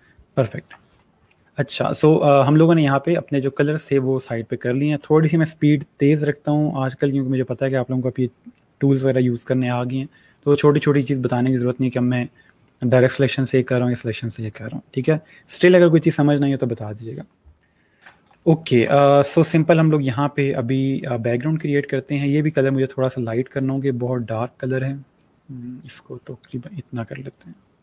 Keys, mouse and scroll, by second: 1.3 click, 3.4 click, 18.0 click, 18.3-18.9 alt+scroll down 2, 18.9 click, 19.3 space, 22.3 click.